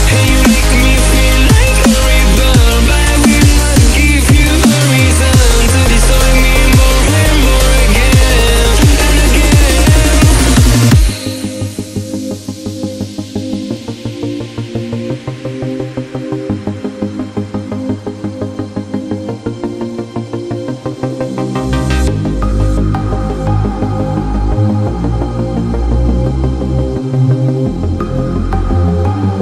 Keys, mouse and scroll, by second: 0.4 space, 0.6-1.0 click, 0.8 space, 2.7-3.9 drag, 14.0-15.9 drag, 26.8 click.